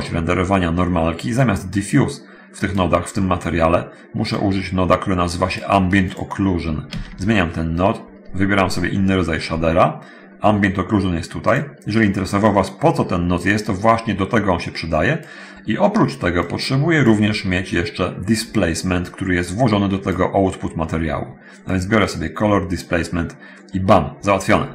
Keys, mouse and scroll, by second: 1.6-3.1 drag, 3.2 middle click, 4.5-5.9 drag, 7.1 shift+s, 11.6 click, 12.2-15.2 drag, 16.6-17.4 drag, 19.2-20.4 drag, 21.9-22.7 drag, 24.5-24.7 scroll up 1.